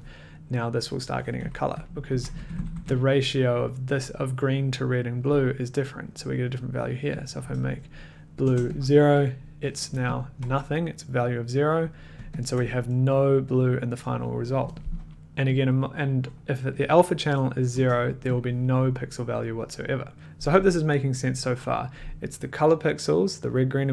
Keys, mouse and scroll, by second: 1.8 click, 2.1 Left, 2.3 Down, 2.6 Down, 2.8 Down, 7.3 click, 8.4 0, 8.7 click, 10.1 ctrl+click, 12.3 click, 15.2-15.5 scroll, 15.5 click, 16.9 click, 17.7 0, 18.3 click.